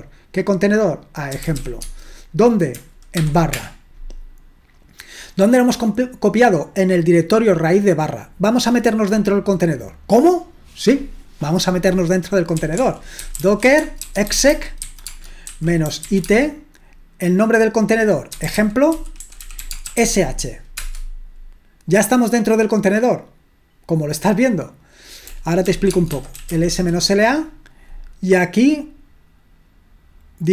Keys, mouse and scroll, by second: 1.1-2.0 typing, 3.2-3.5 typing, 12.3-16.5 typing, 18.2-20.4 typing, 20.8 Return, 25.4-27.0 typing.